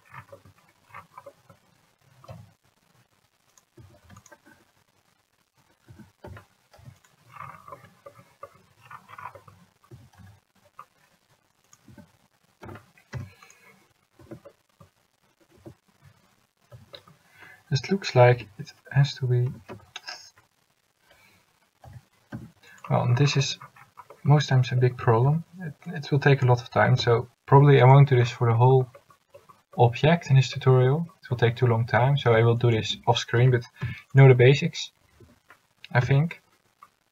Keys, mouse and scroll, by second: 2.5 g, 3.9 a, 4.3 c, 6.5 s, 10.1 a, 11.8 c, 12.8 s, 14.3 Tab, 15.7 Tab, 16.9 a, 18.5 l, 19.6 s, 25.3 a, 26.0 c, 27.1 s, 32.2 a, 32.7 c, 33.6 s, 35.4 a, 36.2 l.